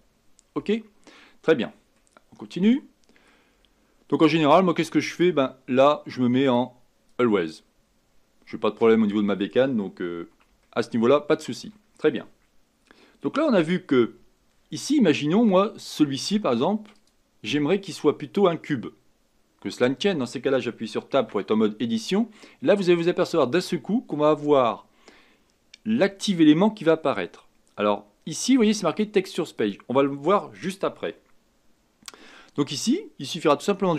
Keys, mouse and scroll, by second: 2.0-3.5 middle drag, 3.5-5.1 scroll up 4, 5.1 click, 6.4-7.7 drag, 7.7-8.1 scroll down 3, 8.2-8.9 scroll up 3, 8.9-10.6 scroll down 1, 10.6-13.8 shift+middle drag, 16.9 click, 21.2 Tab, 28.8-33.4 drag.